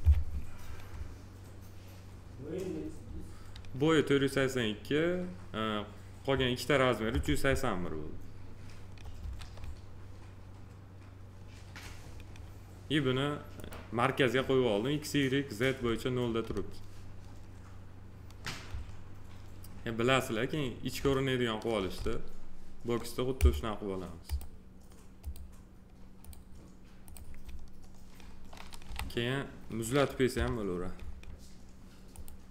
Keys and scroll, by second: 9.2 s, 28.8 f, 30.3 p.